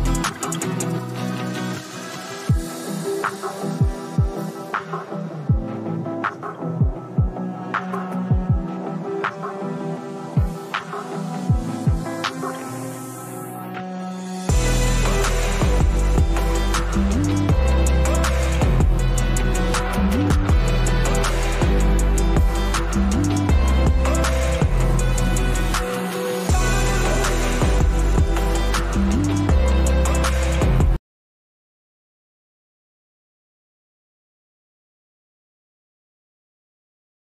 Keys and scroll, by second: 20.5 ctrl+g.